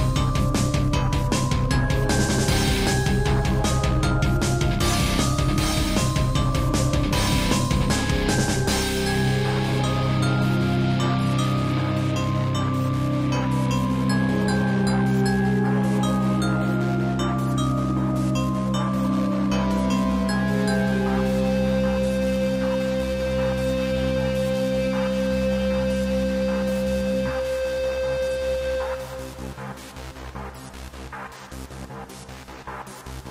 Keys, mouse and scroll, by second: 0.7 click, 1.2 middle click, 1.9 shift+middle click, 2.3 middle click, 3.0 click, 3.8 middle click, 4.6 shift+middle click, 4.8 shift+middle click, 5.0 middle click, 6.4-7.0 typing, 7.9 Escape, 8.3-8.8 typing, 10.7 z, 12.5 click, 12.6 click, 12.9 middle click, 13.4 scroll up 2, 14.4 click, 14.7 middle click, 16.2 middle click, 16.8 ctrl+z, 18.4 click, 19.3 shift+click, 20.2 shift+click, 22.9 click, 23.0 click, 24.6 click, 24.6 click, 26.0 typing, 27.9 click, 28.0 click, 28.4 shift+middle click, 29.6 click, 29.7 click, 30.6 alt+r, 31.3 alt+g, 31.7 middle click, 32.7-33.1 typing.